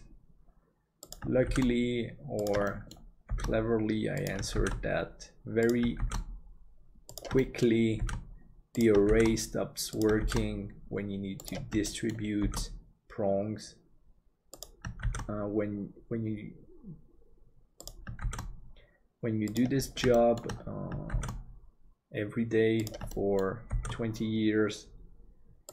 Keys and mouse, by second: 2.8 middle click, 7.5 shift+middle click, 11.9 shift+middle click, 18.2 shift+d, 20.2 middle click, 23.1 middle click, 23.9 shift+d.